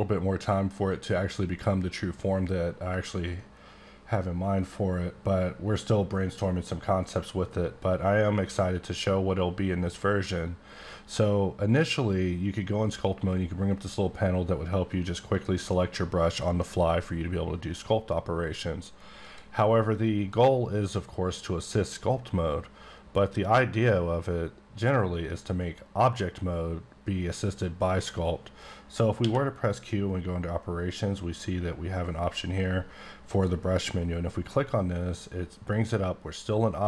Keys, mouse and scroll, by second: 4.5 click, 12.4-13.4 scroll up 9, 13.4-13.7 scroll down 10, 13.9-14.3 scroll up 7, 14.3-15.3 scroll down 4, 15.3 click, 19.9 click, 29.2 q, 33.3 click.